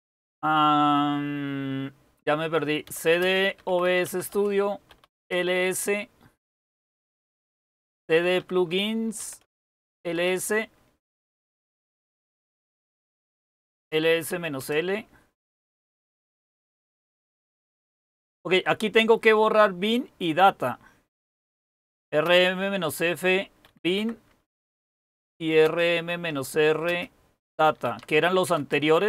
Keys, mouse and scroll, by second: 2.6-5.7 typing, 7.1-10.5 typing, 13.2-15.1 typing, 21.2-29.0 typing, 24.7 Return.